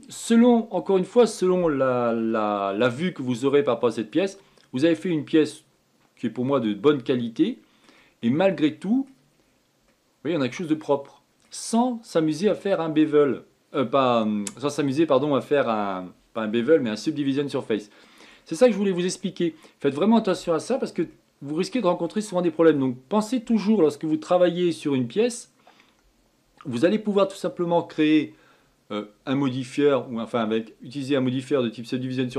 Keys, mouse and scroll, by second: 0.6-1.5 scroll down 6, 1.5-5.1 middle drag, 5.1-5.6 scroll up 2, 5.6-8.6 middle drag, 9.0-10.1 middle drag, 10.1-10.6 scroll up 5, 10.6-12.5 middle drag, 12.5-13.3 scroll down 4, 13.3-19.5 shift+middle drag, 19.5-20.0 scroll down 2, 20.0-25.9 middle drag.